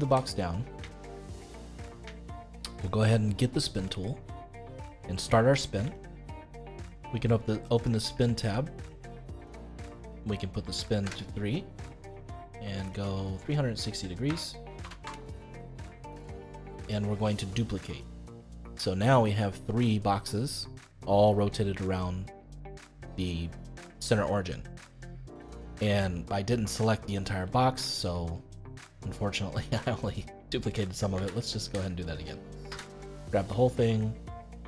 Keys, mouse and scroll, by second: 0.9 shift+middle click, 1.7-2.1 scroll down 2, 2.1-3.7 shift+middle drag, 3.7-12.1 drag, 12.9-16.0 drag, 17.8 click, 19.2-31.1 middle drag, 31.1 ctrl+z, 32.0 middle click, 32.6 a, 33.3-34.5 middle drag, 34.5-34.6 drag.